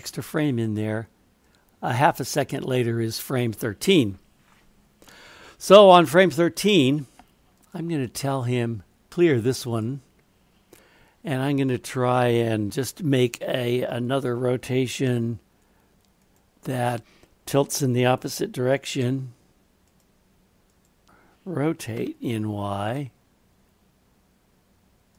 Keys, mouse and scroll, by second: 1.5-3.2 drag, 7.5-9.9 drag, 11.8 click, 12.7 r, 14.0 click, 15.1 r, 19.0 r.